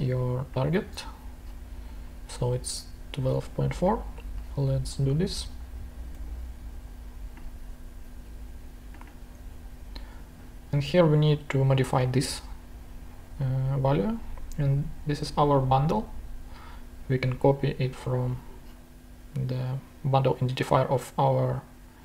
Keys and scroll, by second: 5.8-6.6 typing.